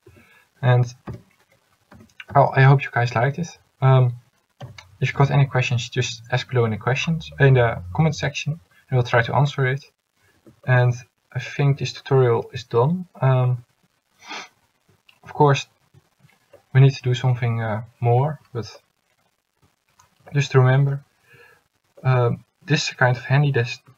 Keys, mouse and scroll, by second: 0.2 a, 1.2 l, 2.1 s, 10.5 Tab, 14.6-15.7 middle drag.